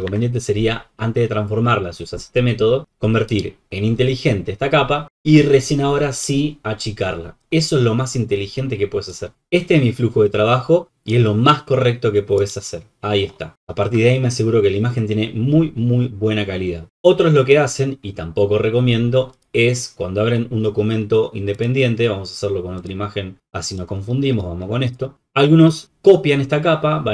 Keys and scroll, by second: 0.0 Escape.